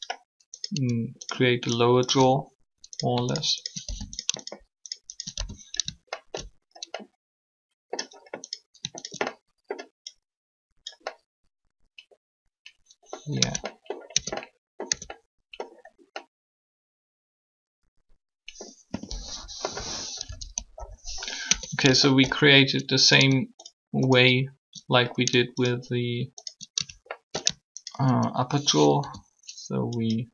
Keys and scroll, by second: 13.4 Tab, 14.1 Tab, 20.1 1, 20.7 3, 21.4 Tab, 29.0 shift+e.